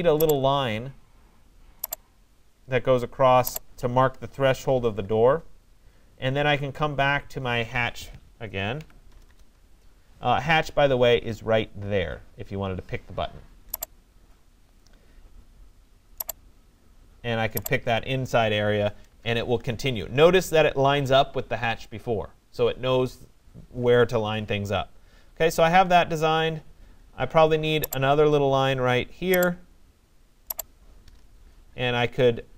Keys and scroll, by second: 4.1 Return, 8.5 j, 9.2 BackSpace, 18.7 Return, 30.8 Return.